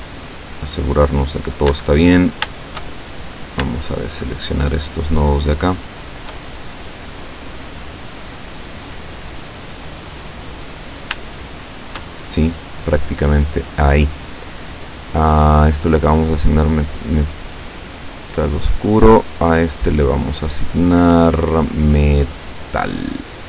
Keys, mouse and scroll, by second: 1.7 Escape, 2.0-2.4 scroll up 1, 2.6-3.7 shift+middle drag, 4.2 shift+right click, 4.8 shift+right click, 5.6 shift+right click, 6.1 shift+right click, 6.6-10.6 shift+middle drag, 11.1 scroll down 2, 11.4 shift+middle click, 18.2 click, 19.9 click, 22.4 click.